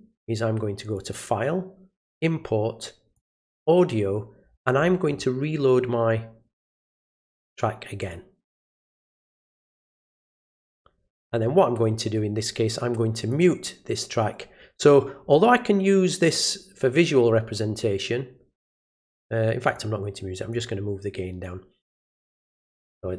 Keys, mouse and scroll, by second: 0.9 click, 3.1 click, 4.5-5.2 scroll down 1, 6.8 click, 8.0 click, 13.3 click, 19.7 click, 20.5-21.9 drag, 22.5 click.